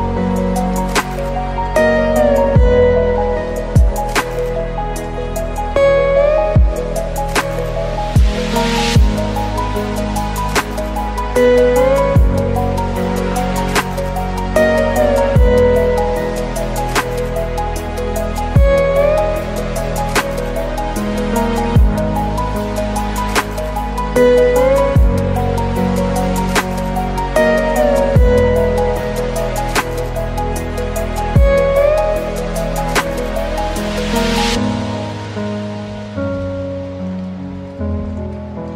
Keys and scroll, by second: 5.0 ctrl+z, 9.6 ctrl+alt+space, 14.3 ctrl+z, 17.9 ctrl+space, 25.3 ctrl+space, 36.1 ctrl+z.